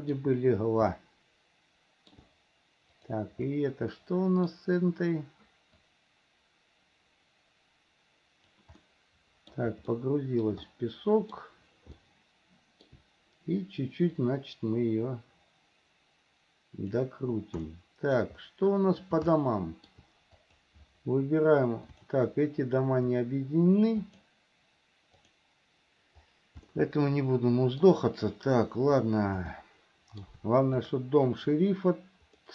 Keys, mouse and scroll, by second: 1.2-2.3 shift+middle drag, 3.1 click, 4.1 middle click, 6.1-8.8 drag, 9.1 middle click, 10.1 shift+middle click, 10.9 middle click, 12.1 shift+middle click, 14.3 click, 15.1-17.2 drag, 17.8 middle click, 19.6 shift+middle click, 20.6 click, 22.1 shift+click, 24.2 click, 26.9-28.1 shift+middle drag, 29.7 shift+middle click, 30.9 click.